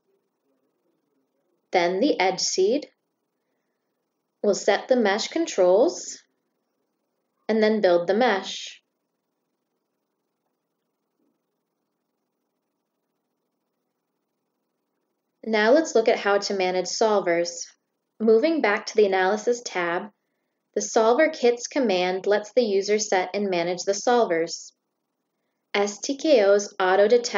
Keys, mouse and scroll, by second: 1.0 click, 3.0 click, 3.6 click, 4.7 click, 6.6 click, 7.3 click, 9.1 click, 15.4 click, 20.3 click, 25.5 click.